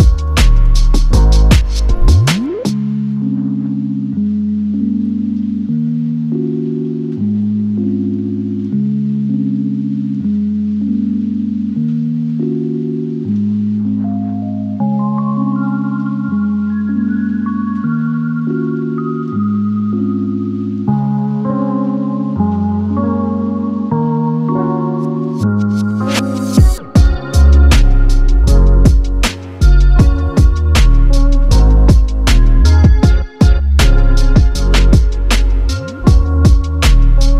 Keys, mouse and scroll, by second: 0.0 ctrl+z, 0.7 typing, 2.1 Return, 2.4 space, 2.6 middle click, 3.2 scroll up 2, 3.4 middle click, 3.8-4.1 scroll down 4, 4.1 scroll up 1, 4.3 middle click, 5.7 scroll down 2, 5.8 middle click, 6.3 scroll down 3, 6.6 middle click, 7.0-7.7 typing, 7.5 scroll up 11, 7.7-8.5 scroll down 11, 8.5 middle click, 8.8-10.8 typing, 8.9-9.4 scroll up 3, 10.9 middle click, 11.5 scroll up 1, 11.6 middle click, 12.1 middle click, 12.4 scroll down 3, 12.5 middle click, 12.9 middle click, 13.6 middle click, 14.3-15.0 scroll up 10, 15.0 middle click, 15.7 middle click, 16.1 scroll down 2, 16.4 middle click, 16.7 scroll down 1, 16.9 middle click, 17.3 scroll up 1, 17.5 middle click, 17.9 middle click, 18.4 scroll down 5, 18.5 middle click, 18.9 middle click, 19.3-20.4 scroll up 4, 19.4 middle click, 23.3 middle click, 24.1 scroll up 1, 24.2 middle click, 24.7 middle click.